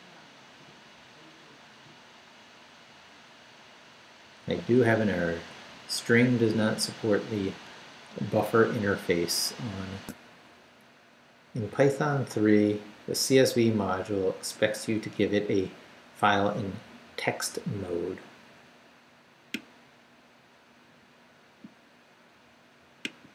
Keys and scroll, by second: 10.0 alt+shift+super+z.